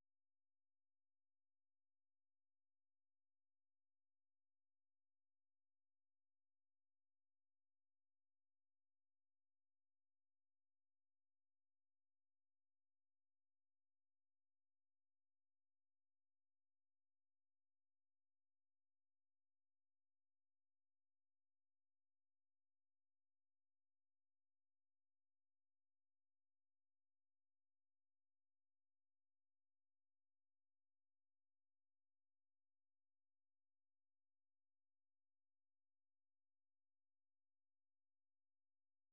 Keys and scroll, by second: 2.0-2.8 typing, 2.9 ctrl+n, 3.1 ctrl+n, 3.4 ctrl+n, 3.9 Return, 4.9-8.6 typing, 14.2 super+2, 18.7 ctrl+w, 36.3 ctrl+f, 36.4-37.9 typing.